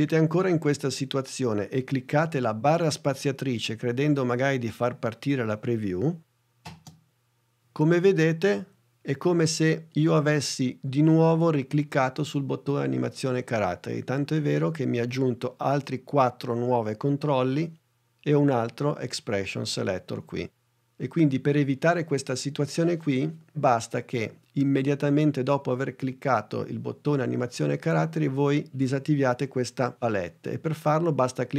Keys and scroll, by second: 6.7 space.